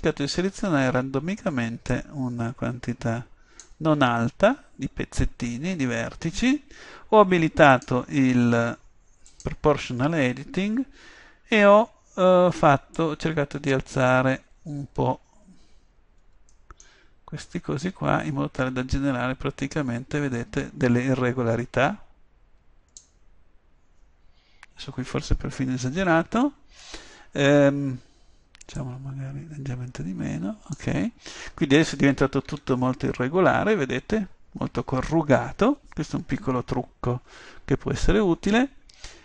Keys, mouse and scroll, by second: 2.0 click, 29.1-30.7 drag, 30.7-33.3 middle drag, 32.5 Tab.